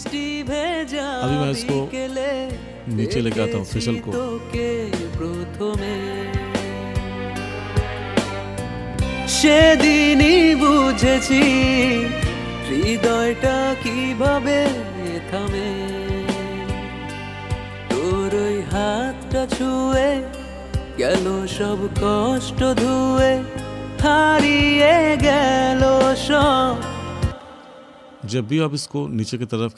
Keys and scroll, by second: 27.3 space.